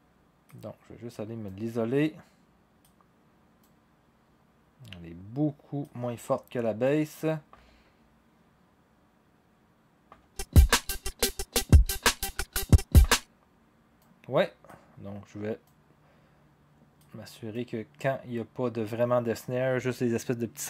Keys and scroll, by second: 7.5 0, 10.1 0, 13.0 0.